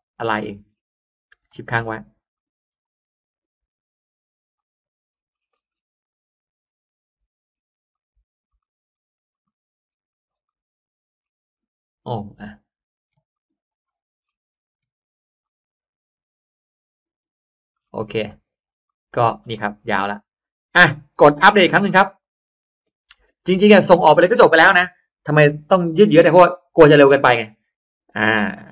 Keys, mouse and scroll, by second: 0.4 middle click, 0.4 scroll up 1, 2.2 shift+click, 4.4 click, 5.0 middle click, 5.2-5.8 scroll down 2, 6.0 click, 6.5-6.8 middle drag, 7.4 middle click, 7.8 click, 8.4 middle click, 8.5-8.8 scroll up 1, 8.8 scroll down 1, 9.2-9.6 scroll up 1, 9.3 middle click, 9.8-10.2 scroll down 1, 10.2 scroll up 1, 10.4 middle click, 11.0-11.4 scroll down 2, 12.0-12.4 scroll up 2, 13.2 shift+click, 14.1-14.5 scroll up 1, 15.3-17.1 shift+drag, 17.6-19.1 shift+scroll down 4, 18.2 middle click, 18.8 middle click, 19.1 space, 19.3 click, 19.9 middle click, 20.7-21.4 drag, 22.1 click.